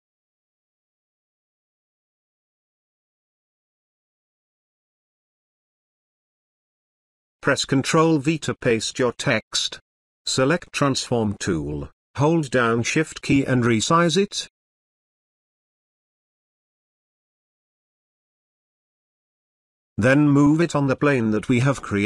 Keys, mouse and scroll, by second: 8.0 ctrl+v, 12.6-16.0 drag, 16.5 ctrl+z, 17.9-19.2 shift+drag.